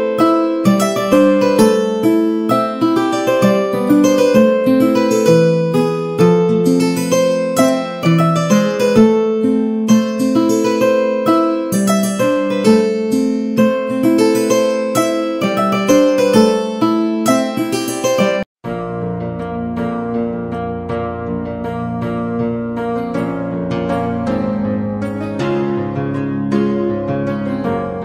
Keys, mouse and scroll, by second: 0.6 middle click, 1.2 a, 1.4 middle click, 1.4 a, 3.9 Tab, 4.2 a, 4.3 a, 4.9 ctrl+r, 7.0 a, 7.1 a, 7.5 alt+shift+click, 8.1 r, 10.3 middle click, 10.6 1, 11.2 shift+middle click, 12.3 g, 13.2 middle click, 14.2 ctrl+b, 20.0 ctrl+z, 20.7 Tab, 20.9 middle click, 21.3 Tab, 21.6 shift+middle click, 22.4 middle click, 23.8 shift+middle click, 24.6 shift+middle click, 25.5 2, 27.0 z, 27.6 shift+middle click.